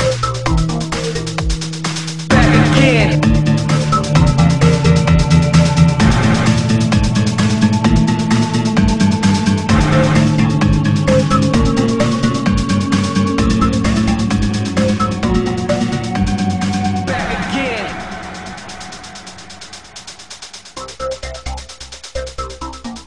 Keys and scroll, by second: 5.7 ctrl+z, 13.6 ctrl+z, 15.3 ctrl+z.